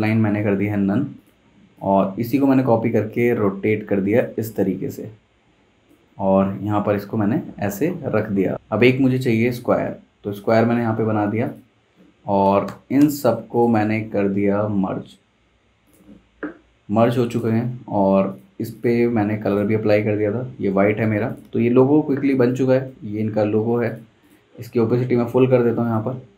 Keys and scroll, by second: 0.7 v, 8.5 super+z, 12.7 v, 22.2 super+g, 23.5 super+z.